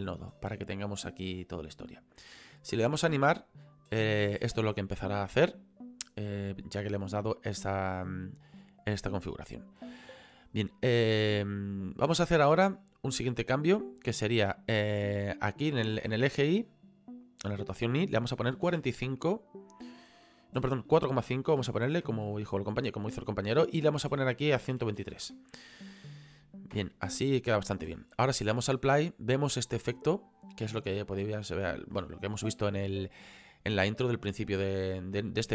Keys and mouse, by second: 2.1 click, 3.2 click, 9.7 click, 10.9 click, 16.3 click, 18.5 KP_4, 18.7 KP_5, 21.5 BackSpace, 22.0 KP_Decimal, 22.2 KP_5, 23.1 click, 24.8 KP_1, 25.0 KP_2, 25.0 KP_3, 28.8 click, 31.1 middle click, 33.7 middle click.